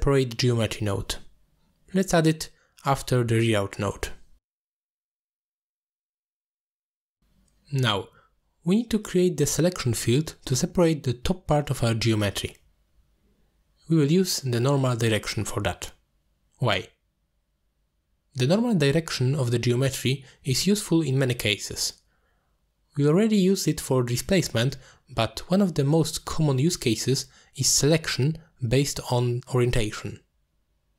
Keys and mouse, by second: 0.0 ctrl+space, 0.5 click, 2.1 shift+a, 8.3 middle click, 11.3 alt+shift+click, 11.6 alt+shift+click, 25.0 middle click, 25.3 shift+a, 29.3 click.